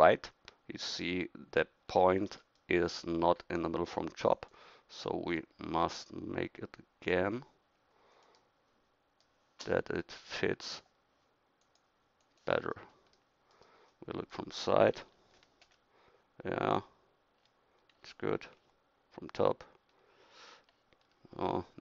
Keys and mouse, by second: 4.3-8.2 drag, 8.2-9.2 middle drag, 9.2-13.4 drag, 13.9 middle click, 15.0 KP_1, 16.9-18.7 middle drag, 18.6 KP_7, 21.1 middle click.